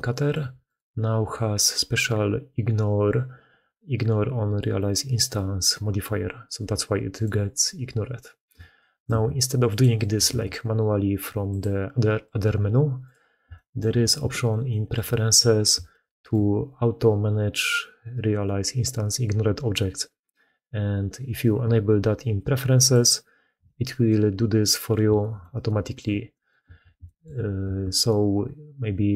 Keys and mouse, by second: 2.8 g, 6.5 g, 9.0 ctrl+x, 10.2 ctrl+x, 13.4 shift+middle drag, 14.6 shift+middle drag, 15.8-16.2 shift+middle drag, 25.1 shift+middle drag, 25.5 shift+middle click, 26.2 middle click, 26.9 shift+middle drag, 27.7 ctrl+x.